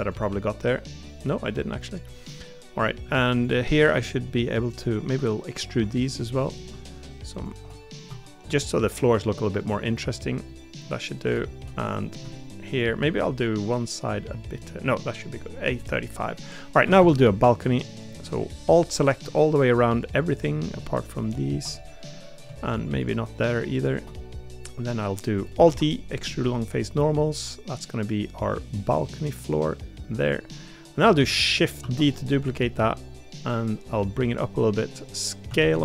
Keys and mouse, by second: 1.2 middle click, 2.8 middle click, 3.8 middle click, 5.5-7.6 ctrl+shift+drag, 10.5 middle click, 14.0 middle click, 14.7 middle click, 15.8 middle click, 17.0 a, 19.4-20.5 middle drag, 21.7 middle click, 24.2 middle click, 24.9 middle click, 25.6 alt+e, 30.5 middle click, 31.8 shift+d, 32.3 middle click, 34.8-35.8 drag.